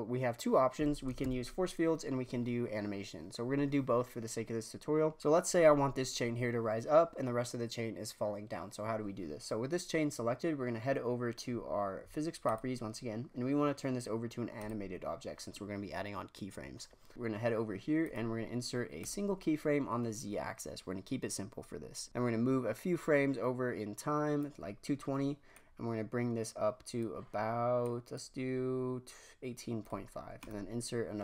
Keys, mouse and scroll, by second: 1.2 shift+Left, 12.4 click, 14.5 click, 18.0-22.1 right drag, 22.1-24.9 drag, 25.5-29.8 drag, 29.8-31.2 right drag.